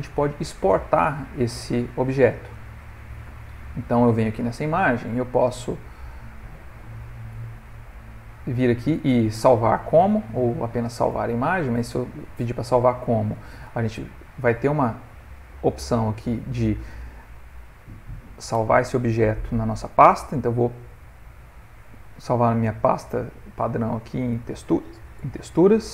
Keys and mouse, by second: 0.1 middle click, 1.5 middle click, 2.5 ctrl+middle click, 2.6 ctrl+middle click, 4.7 click.